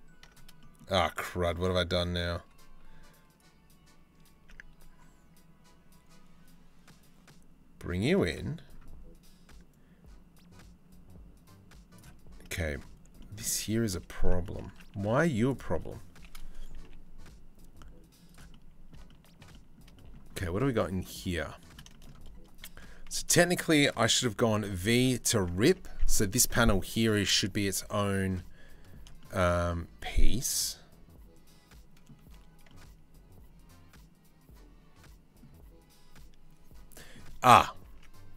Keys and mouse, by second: 0.2 middle click, 2.2-7.6 middle drag, 7.9 click, 9.3-11.7 drag, 12.1 shift+middle click, 12.7-13.9 shift+middle drag, 13.9 Tab, 14.0 click, 14.3 Tab, 14.6 1, 15.2 click, 16.4 g, 18.1 middle click, 18.6 shift+middle click, 19.2 middle click, 19.6 shift+middle click, 22.4 2, 24.1 v, 25.3 Tab, 25.5 Tab, 28.8 shift+click, 29.6-31.7 shift+drag, 32.3-35.0 drag, 36.6 click, 37.1 Tab, 37.5 Tab.